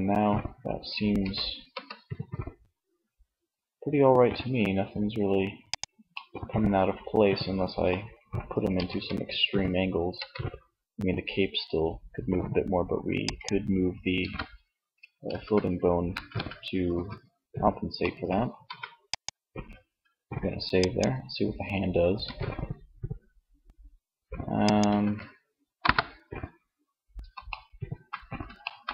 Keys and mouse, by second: 0.4 r, 5.0 click, 5.3-7.5 middle drag, 7.9 r, 12.5-13.9 drag, 13.3 ctrl+z, 14.6 ctrl+z, 15.3 a, 15.4 a, 16.1 alt+r, 17.6 middle click, 17.7 ctrl+s, 21.3 r, 24.0 ctrl+z, 24.9 KP_1.